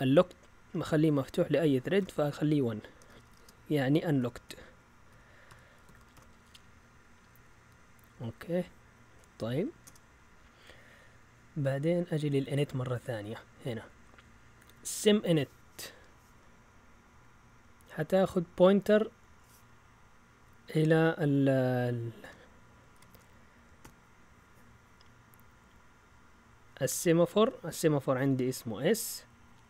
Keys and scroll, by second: 2.7-11.3 typing, 12.3 typing, 14.3 typing, 15.8 typing, 22.9-24.3 typing.